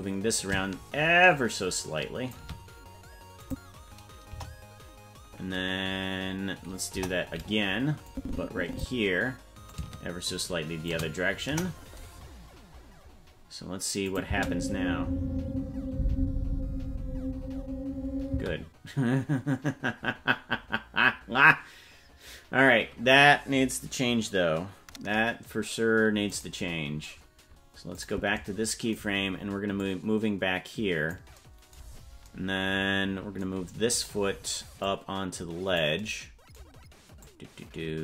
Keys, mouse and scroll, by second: 0.3-2.3 shift+drag, 3.4 click, 4.2 KP_0, 6.9 KP_0, 8.0 click, 9.6-10.9 shift+drag, 11.4 KP_0, 12.4-13.3 scroll up 10, 14.0 click, 14.2 space, 18.3 space, 20.3-20.8 scroll down 3, 26.4 right click, 27.9 click, 29.8-31.1 drag, 31.8 scroll down 4, 34.0 right click, 34.8-35.8 drag, 37.2 click.